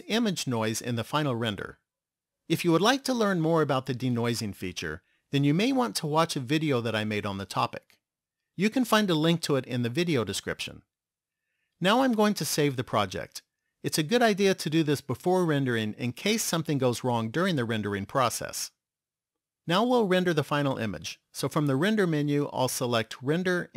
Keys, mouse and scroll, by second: 13.5 click, 21.7 click.